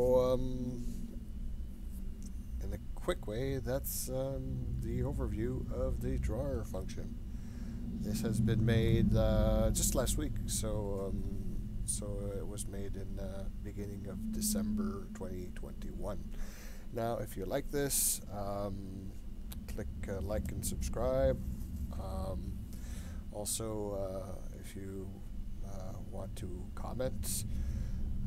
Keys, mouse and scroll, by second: 4.9-6.6 scroll down 2, 6.8-8.8 shift+middle drag.